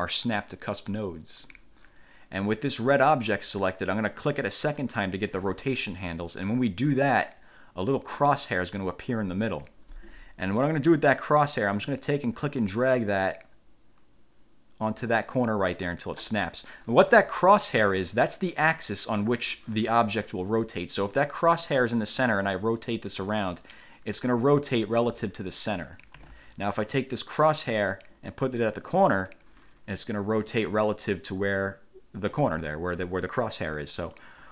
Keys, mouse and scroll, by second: 1.1 click, 4.8 click, 8.5-8.8 ctrl+scroll up 2, 11.8-16.6 drag, 18.0 ctrl+z, 23.0-26.2 drag, 26.3 ctrl+z, 27.4-29.6 drag, 30.6-34.5 drag.